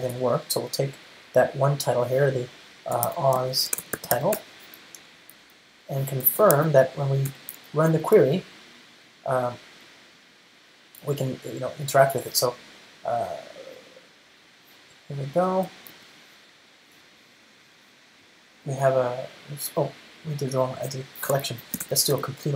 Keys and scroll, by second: 7.4 Return, 21.5 ctrl+alt+shift+Left.